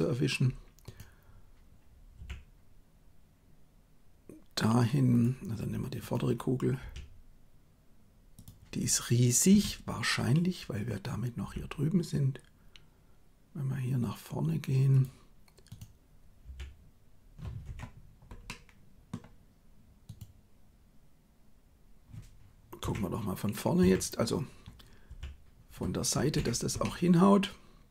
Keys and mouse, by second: 2.2 g, 6.8 r, 9.6 KP_3, 11.4 g, 16.5 r, 18.4 middle click, 22.8 KP_1, 23.8 KP_3, 25.1 r, 26.7-27.9 middle drag.